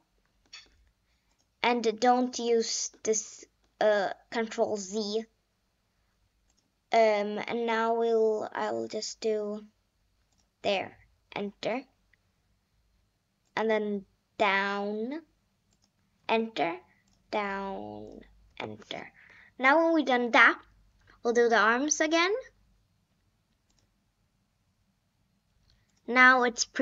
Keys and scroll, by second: 0.3 Return, 2.3 Return, 11.3 Return, 13.3 Return, 16.2 Return, 17.0 Return.